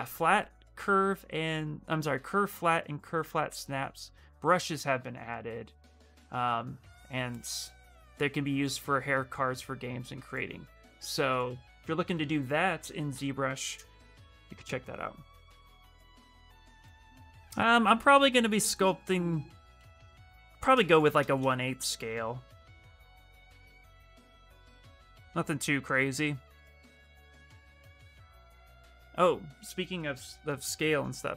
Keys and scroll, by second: 12.9 ctrl+v, 13.4 Return, 21.7 q.